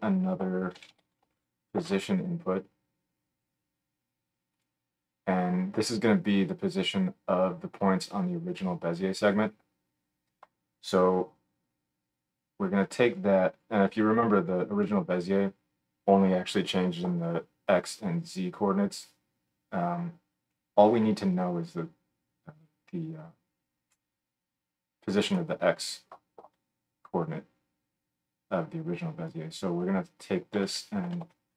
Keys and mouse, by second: 13.1-31.5 drag.